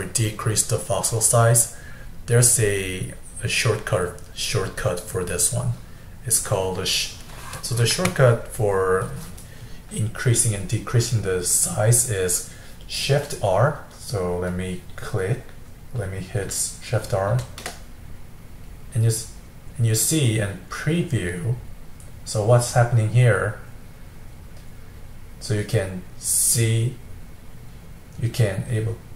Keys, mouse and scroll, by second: 10.8-13.8 middle drag, 14.1-17.2 middle drag, 17.3 shift+r.